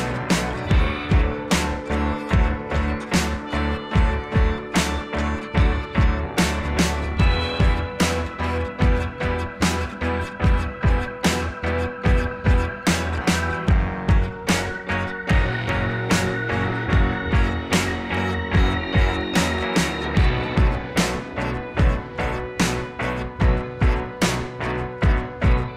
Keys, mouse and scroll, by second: 1.1 click, 5.0 click, 7.3 click, 8.9 [, 9.0 [, 9.1 [, 11.7 [, 12.3 ], 13.7-14.0 [, 14.9 ], 19.1 ], 23.8 [, 23.9 [, 23.9 [, 24.0 [.